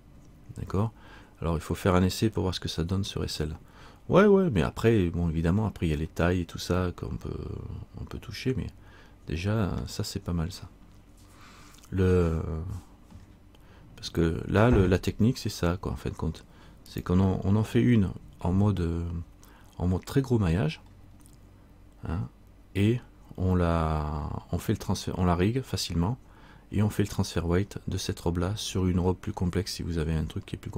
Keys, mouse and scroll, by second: 5.5-6.1 scroll up 3, 6.2 middle click, 12.1-13.2 scroll up 2, 13.3 scroll down 1, 21.0-24.4 scroll down 1.